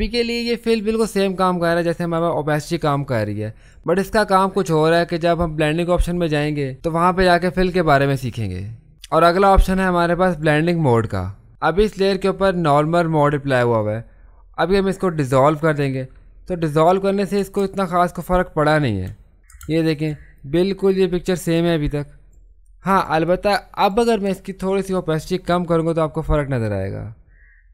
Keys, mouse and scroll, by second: 8.9 click, 10.3 click, 15.6 click, 17.6 ctrl+space, 17.8 ctrl+click, 18.1 ctrl+space, 19.5 ctrl+space, 19.8 ctrl+click, 20.6 space, 21.1 click, 21.7 click, 22.9 space, 23.2 click, 23.3 space, 25.5-27.7 drag.